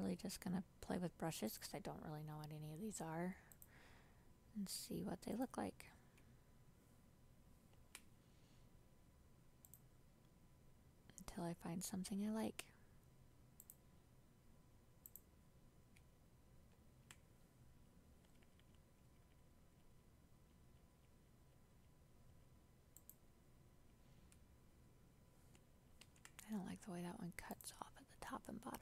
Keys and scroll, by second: 7.8 ctrl+z, 16.8 ctrl+z, 26.1 ctrl+z.